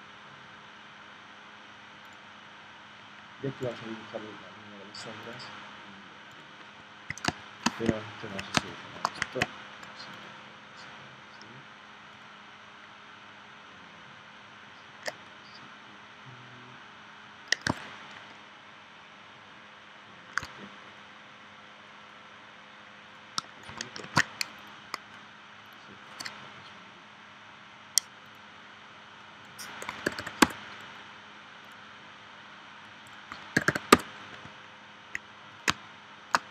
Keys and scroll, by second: 7.3 space, 8.6 space, 24.0 shift+super+g, 29.9 1, 30.4 Return, 33.3 1, 33.9 Return, 35.7 space.